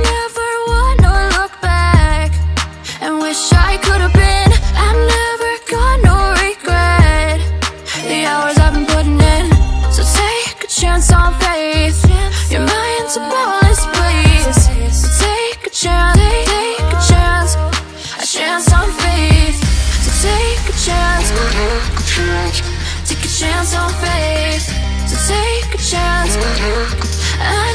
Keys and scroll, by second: 1.7 ctrl+j, 6.2 ctrl+j.